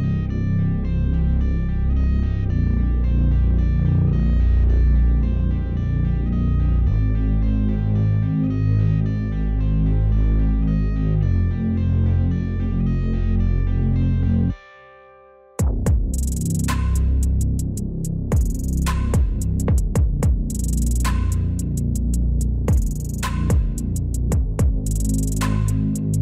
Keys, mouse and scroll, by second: 0.1 double click, 0.2 Tab, 0.5 shift+click, 7.0 double click, 7.2 shift+click, 7.6 scroll up 1, 7.7 shift+middle click, 8.4 scroll down 1, 8.5 shift+middle click, 9.1 double click, 9.2 middle click, 10.3 shift+scroll up 1, 10.9 Tab, 10.9 ctrl+r, 11.2 double click, 11.5 alt+click, 11.6 s, 12.0 double click, 12.1 middle click, 12.4 ctrl+r, 12.5 scroll up 1, 12.8 double click, 12.9 right click, 13.0 scroll down 1, 13.9 middle click, 14.1 s, 14.5 alt+click, 14.6 s, 14.9 Tab, 14.9 scroll down 1, 15.0 middle click, 15.8 scroll up 1, 15.8 shift+middle click, 15.9 shift+middle click, 16.1 Tab, 16.2 shift+middle click, 16.3 shift+scroll up 2, 16.5 alt+click, 16.9 ctrl+b, 17.3 double click, 17.4 scroll down 1, 17.4 middle click, 17.8 scroll up 1, 17.9 alt+click, 18.0 alt+middle click, 18.2 alt+shift+click, 18.4 middle click, 18.5 Tab, 18.7 double click, 19.9 Tab, 20.1 middle click, 20.2 scroll up 2, 20.4 ctrl+b, 21.0 Tab, 21.1 middle click, 21.4 scroll down 1, 21.5 middle click, 22.2-22.5 scroll down 1, 22.7 scroll up 1, 23.0 scroll down 1, 23.0 scroll up 1, 23.3 alt+click, 25.1 alt+click, 25.3 scroll up 1, 25.7 alt+click.